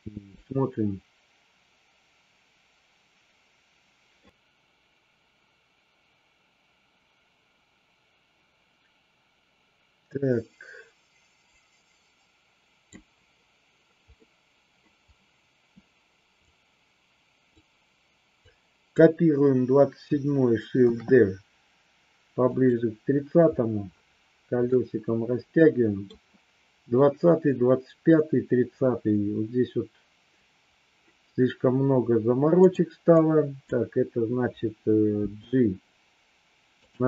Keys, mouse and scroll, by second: 0.4-13.0 drag, 14.2 middle click, 16.4 click, 18.4-19.0 drag, 20.9 shift+d, 24.9-26.1 middle drag, 32.6 click, 33.0-33.6 drag, 35.1 g, 36.7 click.